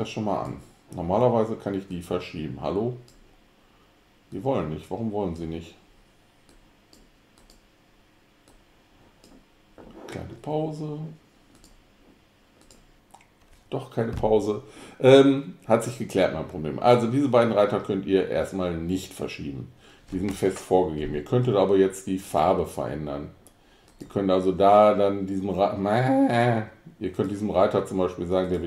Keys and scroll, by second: 17.3 alt+Right, 17.8 Right, 18.0 Right.